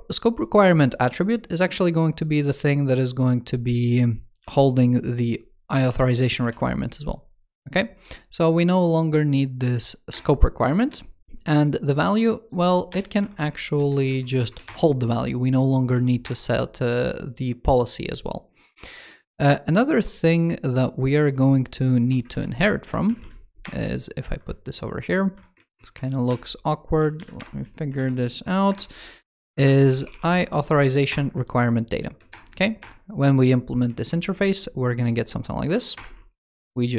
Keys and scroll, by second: 4.2 super+c, 5.7 super+v, 13.8 super+Right, 14.4 super+Return, 22.7 alt+Right, 24.2 super+Right, 25.4 super+Left, 27.7 super+Right, 32.1 super+Return, 33.8 ctrl+shift+f.